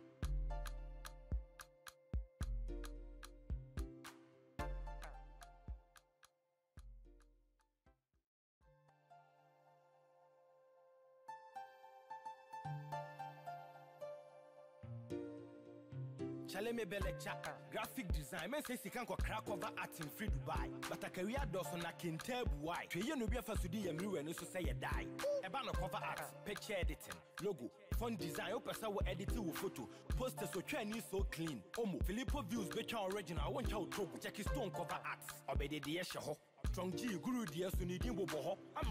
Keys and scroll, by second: 22.0 ctrl+z, 28.8 ctrl+-, 36.9 ctrl+[.